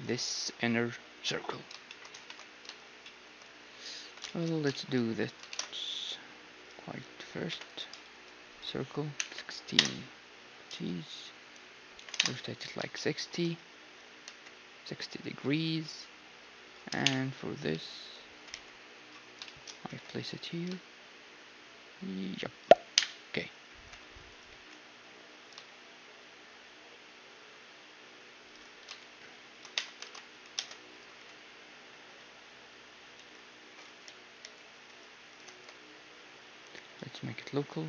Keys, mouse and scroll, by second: 2.2 ctrl+s, 2.2 middle click, 4.1 z, 4.2 middle click, 5.3-7.2 drag, 5.5 shift+a, 7.5 F6, 10.4-12.2 scroll up 1, 10.7 r, 12.2-12.9 scroll up 1, 12.9-15.4 middle drag, 14.2 g, 15.6 s, 17.0 KP_3, 17.6-21.2 middle drag, 17.7 z, 18.4 g, 19.9 g, 21.2-22.4 drag, 22.9 KP_1, 23.8 g, 24.5 g, 28.8 s, 29.7 Tab, 30.6 ctrl+Tab, 31.2 e, 35.4 ctrl+space, 36.9-37.8 drag.